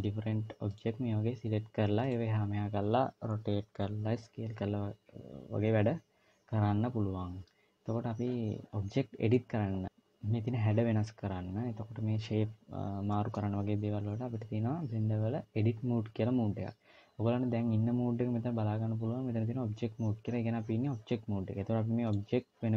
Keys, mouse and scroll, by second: 1.8 click, 8.7 middle click, 9.5-9.9 scroll up 2, 12.9 middle click, 21.9 click.